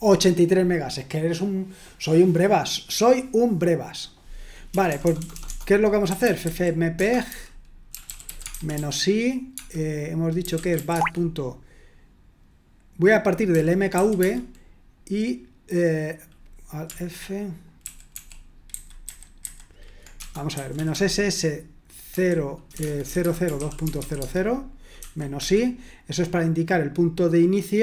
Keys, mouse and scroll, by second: 4.7-11.2 typing, 13.5-14.2 typing, 17.8 alt+f, 18.1 alt+f, 18.7 alt+b, 19.0 alt+b, 22.1-25.0 typing, 25.3 Escape.